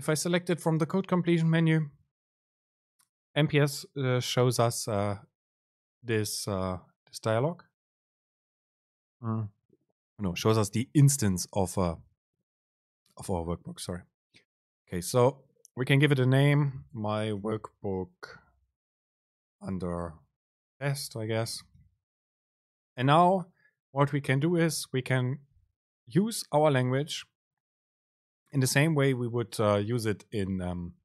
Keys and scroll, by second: 22.7 Down, 24.2 Return, 24.7 BackSpace.